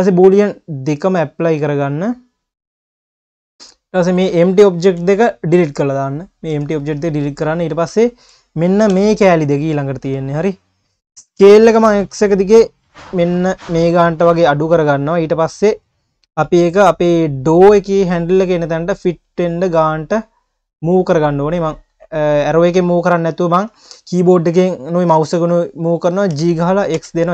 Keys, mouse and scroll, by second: 0.4-4.1 drag, 5.0 Delete, 5.9 click, 6.5 Delete, 7.2 click, 8.1 shift+click, 8.9 KP_1, 10.3 click, 11.1 scroll up 1, 11.4 s, 15.0 click, 15.7 scroll down 1, 15.8 q, 16.7-18.3 scroll up 1, 18.3-19.2 drag, 19.2-20.8 scroll down 1, 20.8 click, 21.4-21.7 scroll up 1, 21.7 q, 22.9-24.0 drag, 24.0-26.3 scroll up 1, 26.3 g.